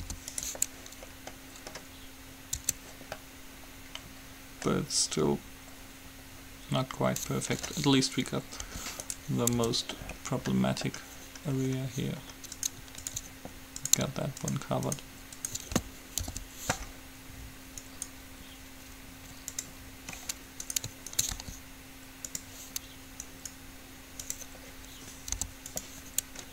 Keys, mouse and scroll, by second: 0.1 u, 2.7 Tab, 8.9 g, 9.8 Tab, 10.1 middle click, 12.8 click, 16.4 alt+p, 16.4 right click, 18.1-19.7 right drag, 20.3 middle click, 20.8-22.9 right drag, 21.6 g, 23.4 right click, 25.6 u.